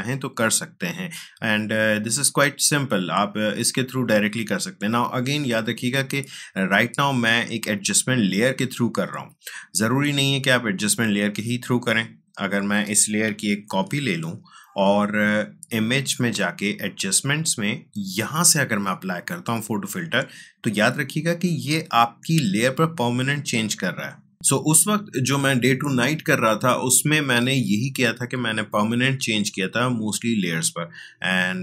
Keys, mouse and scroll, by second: 1.3-6.9 drag, 10.6-13.7 drag, 13.7 ctrl+j, 15.8 click, 19.9 click, 29.7-31.6 drag.